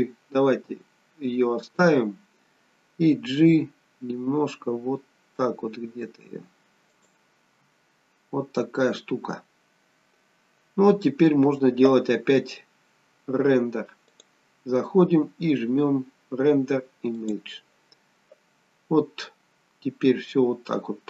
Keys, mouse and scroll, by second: 19.2-19.8 scroll down 1, 20.3-20.7 scroll down 1.